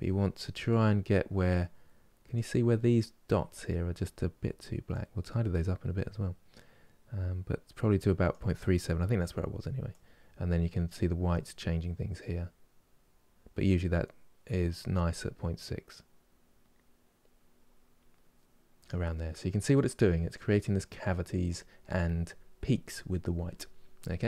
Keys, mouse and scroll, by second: 19.0 scroll down 2, 19.4-22.0 middle drag, 22.0 scroll up 3.